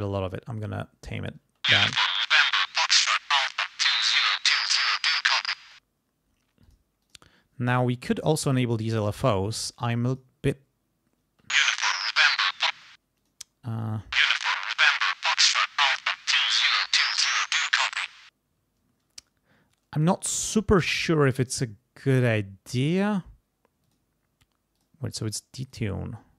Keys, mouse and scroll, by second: 1.4 space, 2.6-5.0 drag, 5.6 space, 6.6 click, 7.0 click, 10.1 click, 11.3 space, 12.7 space, 13.2 click, 13.9 space, 16.4 click, 19.0 space, 23.8 click, 24.7 click, 25.6 click.